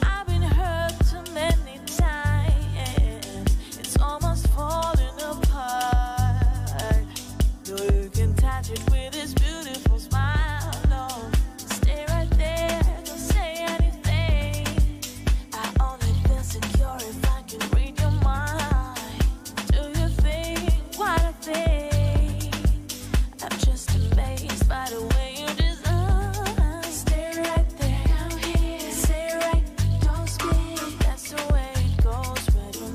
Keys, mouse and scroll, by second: 7.4 click, 12.7 double click, 13.4 click, 15.2 double click, 17.1 click, 19.8 click, 25.1 click.